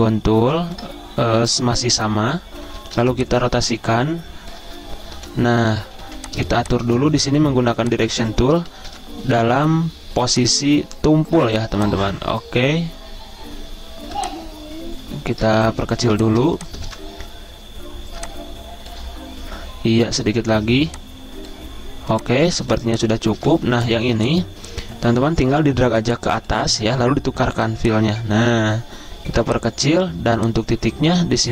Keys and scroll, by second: 3.0 r, 5.2-7.8 typing, 8.9 v, 10.7-11.4 typing, 16.1-17.4 typing, 22.3 z, 23.4 v.